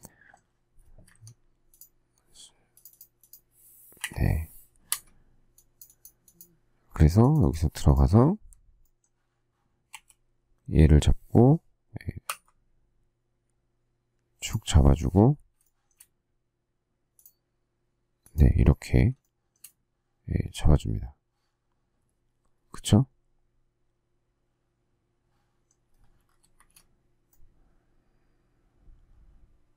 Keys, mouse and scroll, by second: 1.0 Escape, 3.9 Delete, 4.8 Escape, 9.8 q, 15.6 shift+middle click, 19.2 shift+middle click, 26.1 space, 26.5 Escape.